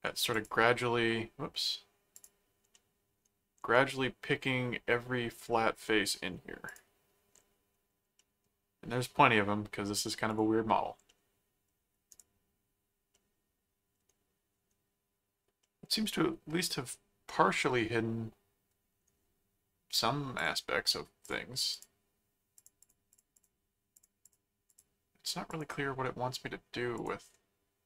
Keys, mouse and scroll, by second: 0.3 click, 2.2 click, 2.7 middle click, 3.7-6.2 middle drag, 6.7 click, 8.2-9.9 middle drag, 10.3 click, 11.1 middle click, 12.1 right click, 13.1 middle click, 15.6 middle click, 17.9-19.0 middle drag, 20.3 click, 21.2 click, 22.6-23.9 drag, 24.0 click, 25.5 click, 26.0 middle click, 27.0 click.